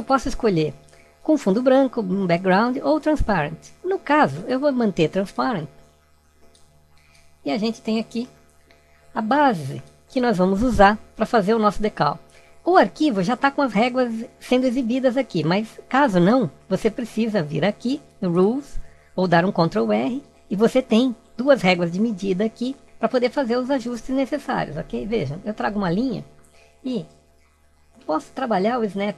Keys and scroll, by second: 8.1 alt+=, 19.6 ctrl+r.